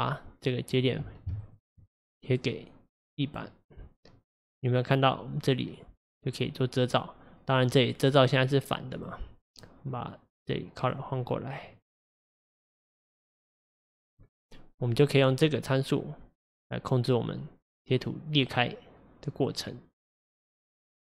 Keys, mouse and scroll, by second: 0.7 click, 1.4 ctrl+shift+click, 3.1-7.2 drag, 10.3 click, 12.9 click, 15.5-18.5 drag.